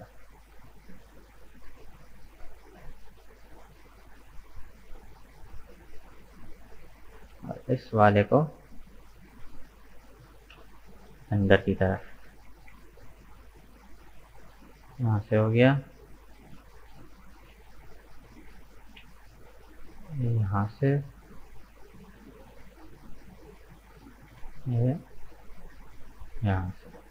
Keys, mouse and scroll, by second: 4.9-6.9 middle drag, 6.9 right click, 7.4 shift+right click, 8.0 shift+right click, 8.4-10.5 middle drag, 10.5 KP_1, 12.0 g, 14.8-16.2 middle drag, 16.2 right click, 16.6 shift+right click, 17.4 KP_1, 18.5 g, 20.8-22.3 middle drag, 22.3 right click, 23.1 KP_1, 24.3 g, 27.0-27.1 middle drag.